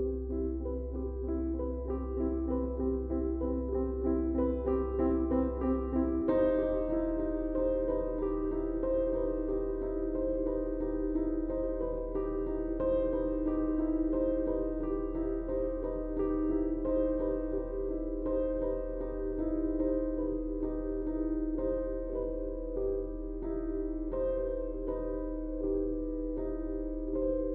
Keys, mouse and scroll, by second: 3.6 click, 3.8 space, 4.0 click, 4.2 space, 5.1 click, 8.3 click, 9.2-13.0 alt+drag, 13.0 ctrl+d, 13.7 click, 14.2 space, 14.4-15.6 ctrl+drag, 17.3 Up, 20.5 space, 20.7 click, 20.8 space, 21.7 space, 22.1 space, 22.3-26.8 ctrl+drag, 27.0 ctrl+space.